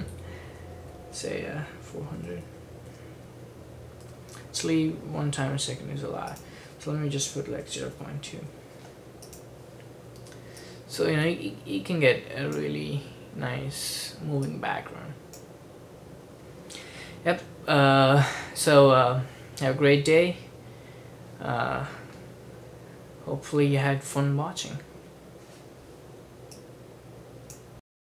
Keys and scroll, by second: 0.0-2.8 typing, 4.1 ;, 7.3-9.0 typing.